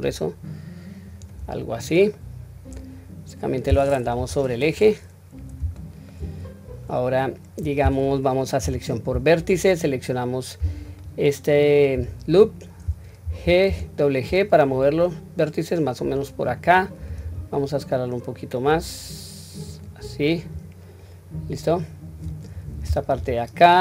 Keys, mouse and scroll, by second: 1.5-2.2 scroll down 1, 2.2-3.8 middle drag, 4.1 KP_1, 4.7-5.2 scroll down 1, 5.7-6.1 shift+middle drag, 6.3-7.2 scroll up 3, 8.6 2, 10.9 alt+click, 13.2 g.